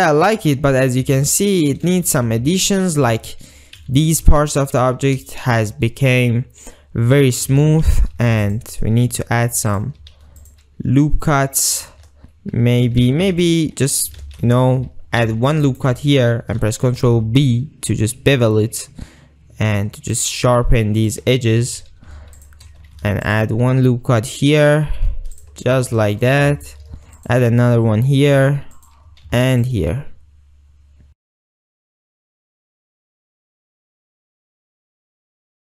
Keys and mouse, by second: 0.0 middle click, 0.2 middle click, 1.2 alt+middle click, 1.8 ctrl+middle click, 2.2 alt+z, 2.7 ctrl+click, 3.7 shift+click, 4.0 alt+z, 7.7 alt+z, 8.2 ctrl+r, 10.2 ctrl+r, 11.9 click, 13.3 ctrl+z, 13.4 ctrl+z, 13.8 ctrl+z, 14.4 ctrl+shift+z, 15.3 ctrl+r, 17.1 ctrl+b, 21.6 g, 21.9 g, 22.5 shift+click, 23.0 ctrl+r, 25.5 ctrl+click, 26.3 shift+middle click, 26.7 ctrl+middle click, 27.0 ctrl+r, 28.9 click, 29.3 ctrl+r, 31.4 ctrl+click, 32.0 ctrl+shift+click, 32.3 alt+shift+z, 32.8 shift+click, 33.0 alt+shift+z, 33.1 shift+middle click, 33.4 ctrl+middle click, 33.7 shift+middle click, 35.2 alt+shift+z.